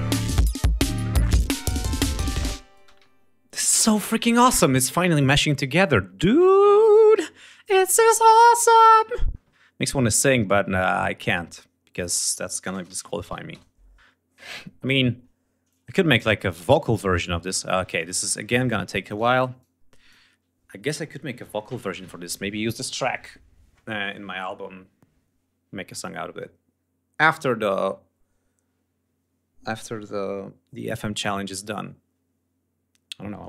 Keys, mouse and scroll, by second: 2.4 space, 2.6 ctrl+scroll down 2, 5.9 click, 8.1 click, 9.6 click, 11.5 click, 12.1-13.0 typing, 13.1 Return, 15.2-18.9 drag, 19.1 click.